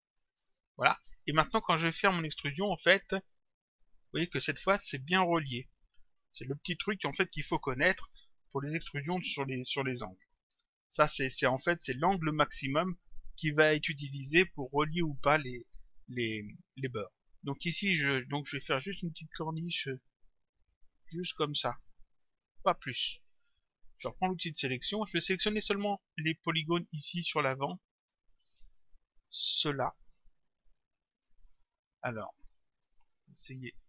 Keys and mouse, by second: 0.1 click, 3.5 click, 6.2 click, 10.4 click, 19.5 click, 24.0 click, 28.0 click, 29.5 shift+click, 31.1 shift+click, 33.2 click.